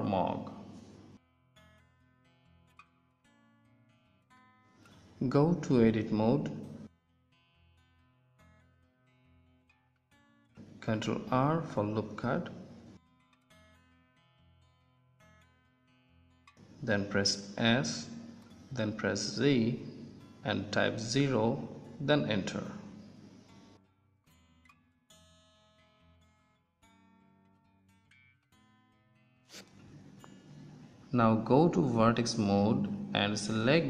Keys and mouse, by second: 6.5 Tab, 12.0 ctrl+r, 24.0-26.3 drag, 26.3-27.3 middle drag, 27.3 click, 28.4 middle click, 30.2 ctrl+z, 31.4 ctrl+Tab.